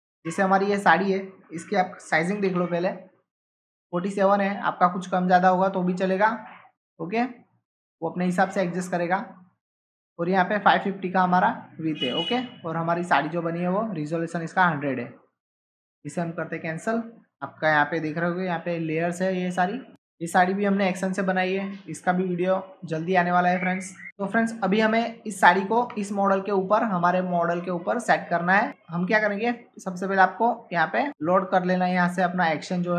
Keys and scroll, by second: 2.1-3.0 typing, 25.8 ctrl+Tab, 28.7 ctrl+Tab.